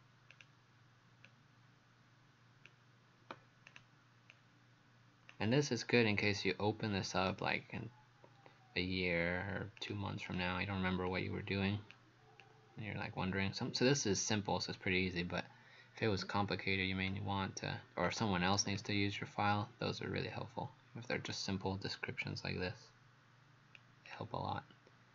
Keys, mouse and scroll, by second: 0.3 click, 4.3 click, 7.3 right click, 9.8 click, 10.3 click, 11.1 click, 18.7-22.2 scroll down 2.